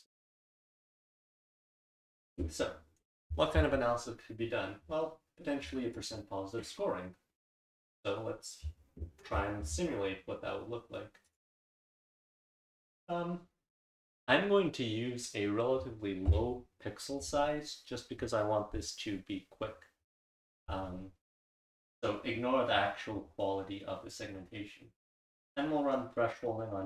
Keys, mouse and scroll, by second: 5.9 click.